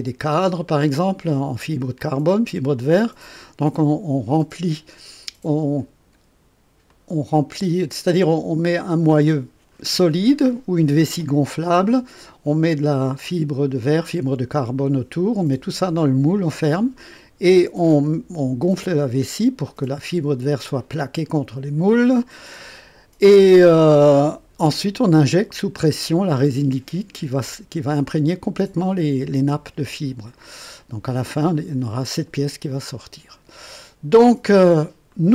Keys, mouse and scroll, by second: 2.0-3.6 drag, 6.9-7.9 drag, 9.0-10.7 drag, 11.6 click, 30.3 click, 31.5-33.9 drag, 35.1-35.3 drag.